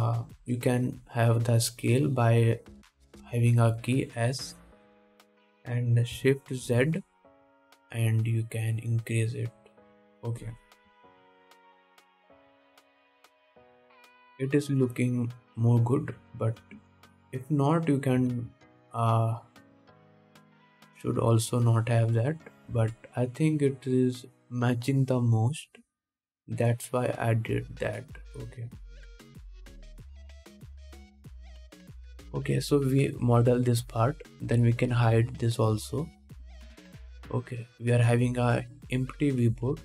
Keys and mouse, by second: 0.5 s, 12.1 KP_7, 14.1 middle click, 14.1 right click, 17.4 ctrl+z, 17.8 ctrl+z, 19.4 s, 24.0 ctrl+Tab, 25.0 click, 25.0 middle click, 25.0 right click, 34.6-39.6 drag, 34.6-35.8 middle drag, 34.6-35.8 right drag, 37.2 middle click, 37.2 right click, 39.6-39.8 middle drag.